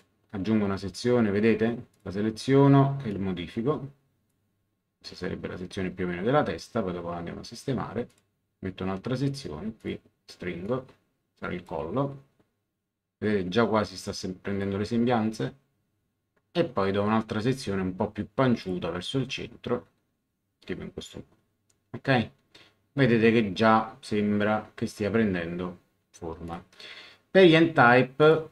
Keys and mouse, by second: 1.9 click, 3.1 click, 8.1 click, 9.8 click, 14.0 click, 18.6 click, 26.4 click, 28.2 click.